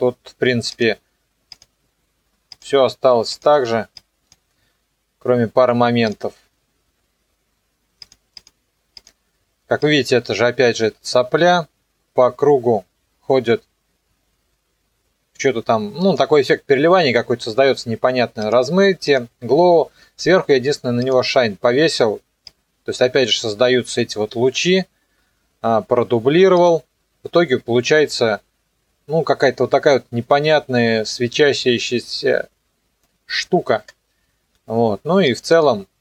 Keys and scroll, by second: 27.4 KP_0, 33.8 KP_0.